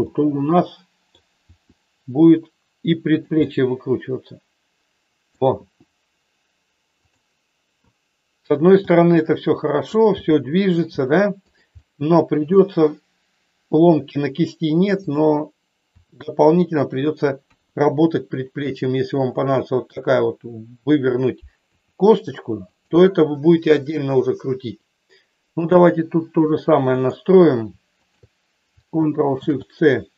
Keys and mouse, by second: 0.0-1.1 middle drag, 1.4 r, 3.1 click, 3.5-5.4 middle drag, 5.6 r, 8.7 g, 10.2 middle click, 11.0 g, 11.9 middle click, 15.9 r, 17.4 KP_1, 19.4 shift+middle click, 21.7 r, 22.7 click, 26.9 click, 28.1 shift+click, 29.4 ctrl+shift+c.